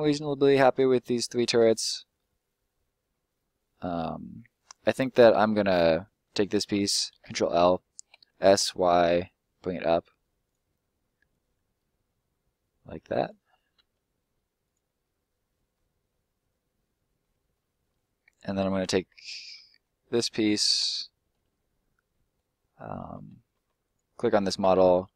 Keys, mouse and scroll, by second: 5.9 right click, 6.7 ctrl+right click, 7.1 ctrl+l, 8.1 s, 8.5 y, 10.4 click, 13.7 s, 14.6 click, 15.0 middle click, 16.1 middle click, 17.5 middle click, 19.5 middle click, 20.3 right click, 21.3 scroll down 1, 21.5 middle click, 23.8 right click, 24.2 middle click.